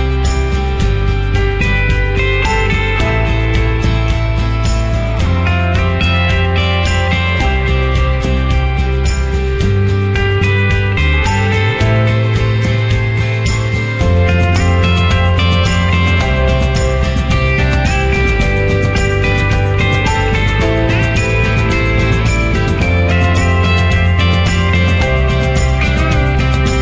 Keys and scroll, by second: 8.1 ctrl+0, 16.7 ctrl+j.